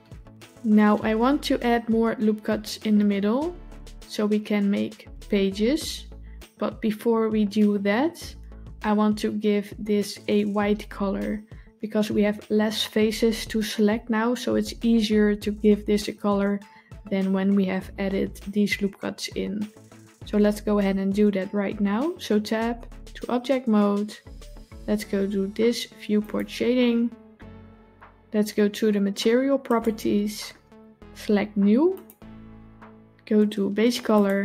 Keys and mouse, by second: 22.5 Tab, 26.3 click, 29.5 click, 31.8 click, 34.0 click.